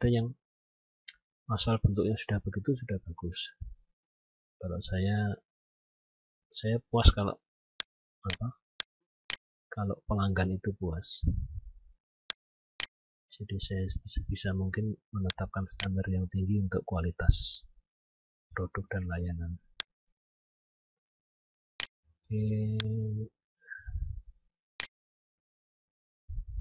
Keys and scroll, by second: 14.8 F10.